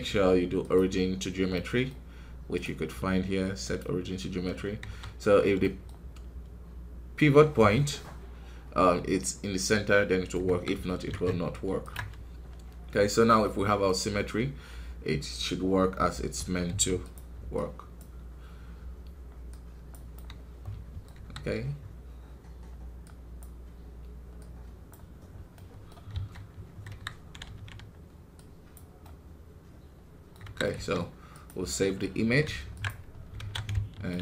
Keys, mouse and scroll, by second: 0.7 q, 1.4-4.7 middle drag, 4.7 KP_1, 5.5-10.4 middle drag, 10.4 KP_1, 11.8 ctrl+Tab, 12.4 scroll up 2, 16.6 f, 17.9-20.1 drag, 20.1-21.1 middle drag, 21.1 KP_1, 23.3-25.1 drag, 25.1 scroll down 3, 25.4-26.8 middle drag, 26.8 KP_1, 27.1 scroll up 2, 27.4 ctrl+z, 28.7 click, 28.9-30.4 middle drag, 30.4 KP_1, 32.7 ctrl+Tab, 33.0 scroll down 4, 33.3 alt+a, 34.1 z.